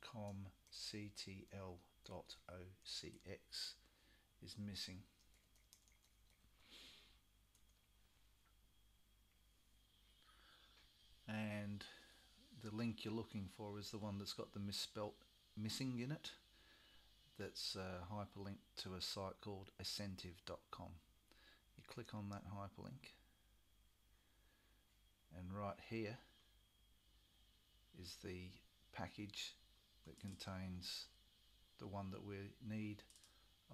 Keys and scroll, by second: 0.0-3.4 typing, 4.9-6.9 typing.